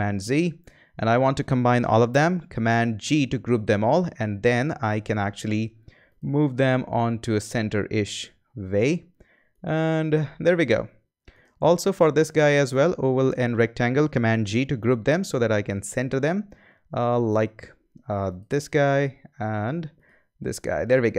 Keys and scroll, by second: 3.0 super+g, 14.4 shift+super+g.